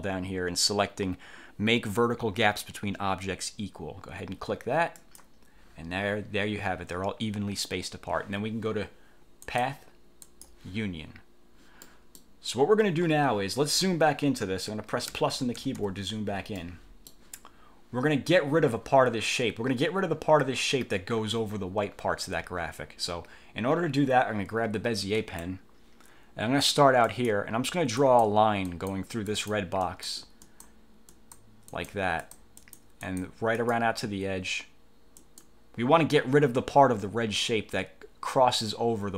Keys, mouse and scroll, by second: 5.1 click, 9.6 click, 10.4 click, 12.0 click, 15.2 =, 16.7-17.4 drag, 25.2 click, 27.2 click, 28.2 click, 28.8 click, 29.4 click, 30.0 click, 30.6 click, 31.2 click, 31.8 click, 32.4 click, 33.7 click, 35.3 click.